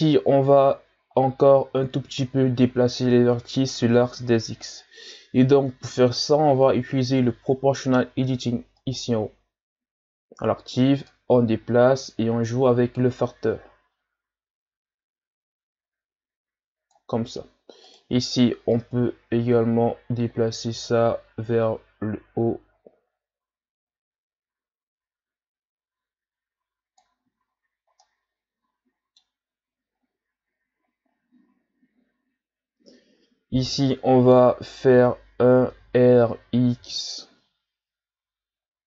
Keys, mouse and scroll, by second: 8.8 click, 11.1-14.1 drag, 17.9 right click, 18.7-21.8 drag, 27.4-28.0 shift+scroll up 5, 28.0-30.0 middle drag, 30.0-31.4 scroll up 3, 33.6-35.7 middle drag, 35.7 o, 36.8 r.